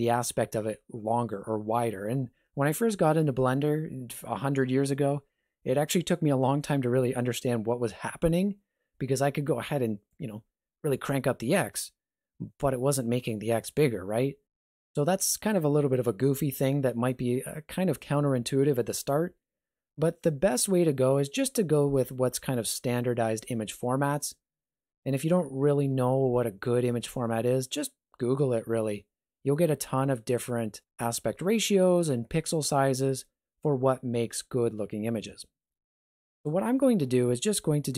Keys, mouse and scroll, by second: 10.1 click, 36.3 click.